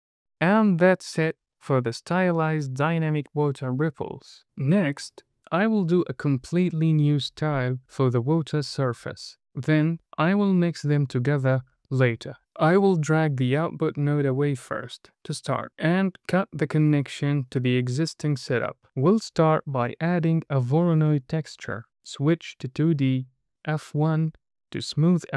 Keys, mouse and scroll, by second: 1.8 space, 10.4-11.0 scroll down 3, 10.9 middle click, 13.0 click, 14.4 middle click, 15.1-15.6 scroll up 3, 15.6 middle click, 17.0 ctrl+right click, 17.8-18.2 scroll up 2, 18.2 middle click, 18.9 shift+a, 21.9 middle click, 22.2-23.1 drag, 23.7-24.9 drag.